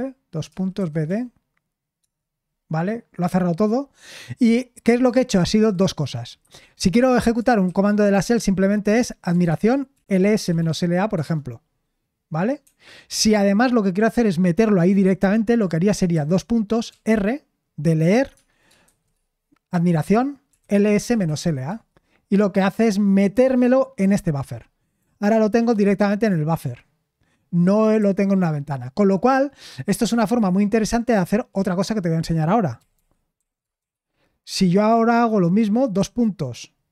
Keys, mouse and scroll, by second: 0.2-1.5 typing, 2.0 Return, 9.5-11.1 typing, 16.4 typing, 19.1 typing, 20.8-21.8 typing, 25.7-28.7 typing, 33.1-34.3 typing, 35.9 typing.